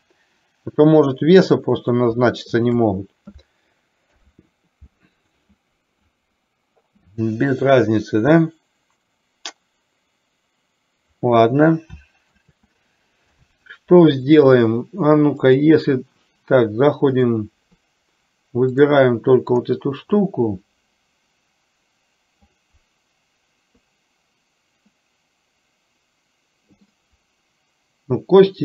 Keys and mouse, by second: 2.8 shift+click, 4.3 ctrl+p, 12.4 ctrl+z, 15.6-16.3 drag, 17.3 click, 27.1-28.6 middle drag.